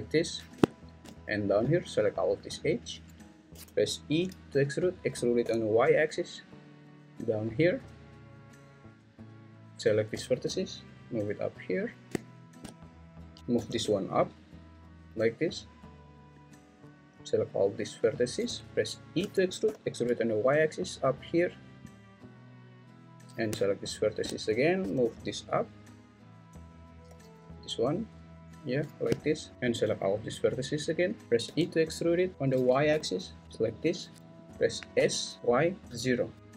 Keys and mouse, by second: 3.5 e, 5.4 y, 10.4 g, 12.3 shift+middle click, 13.4 Escape, 13.5 g, 14.1 y, 19.2 e, 19.6 y, 24.8 g, 25.0 y, 27.2 g, 29.5 Escape, 31.4 e, 32.9 y, 35.0 s, 35.4 y, 35.9 0.